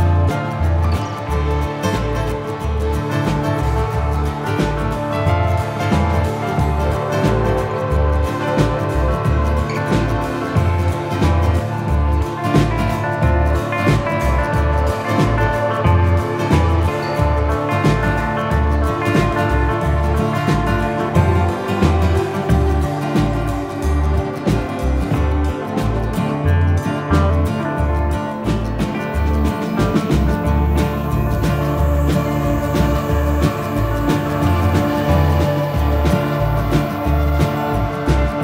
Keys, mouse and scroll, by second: 0.9 click, 1.5 ctrl+middle click, 2.5 click, 4.9 click, 5.9 click, 5.9 middle click, 6.5 middle click, 7.5 click, 8.1 middle click, 8.5 middle click, 10.0 middle click, 11.3 click, 15.1 click, 18.3 click, 22.3 click, 22.5 middle click, 22.7 scroll up 1, 23.7 middle click, 24.5 click, 24.8 click, 25.4 click, 26.3 middle click, 27.9 middle click, 28.9 middle click, 29.3 z, 29.8 click, 30.5 ctrl+s, 32.6 click, 33.3 shift+p, 33.5 n, 33.7 Return, 36.3 click, 38.1 click.